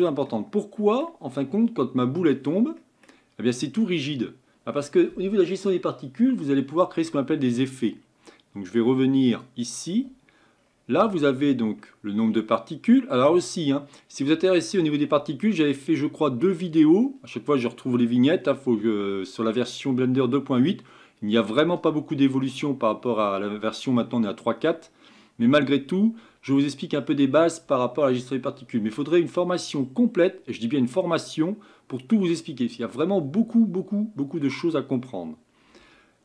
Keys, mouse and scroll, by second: 0.3-2.1 middle drag, 2.1-2.8 drag, 2.8-5.9 middle drag, 9.2 click, 10.6 scroll up 4, 11.6 scroll down 2.